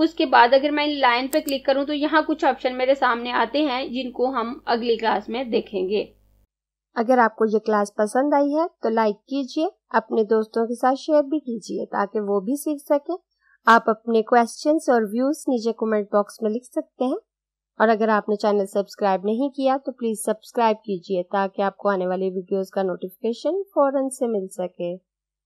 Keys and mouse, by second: 0.0 click.